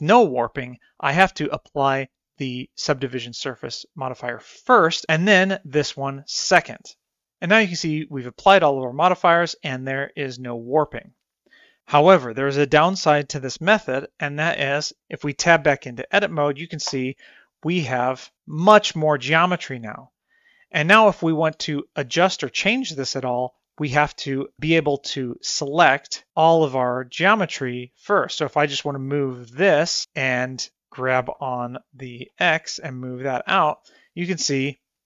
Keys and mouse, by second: 1.3-4.3 drag, 4.8-6.1 drag, 10.8-11.5 middle drag, 15.0 Tab, 17.3 a, 18.8-20.3 middle drag, 20.7 middle click, 21.9 shift+middle click, 22.1 middle click, 22.7 middle click, 23.5 3, 24.6 c, 30.7 g.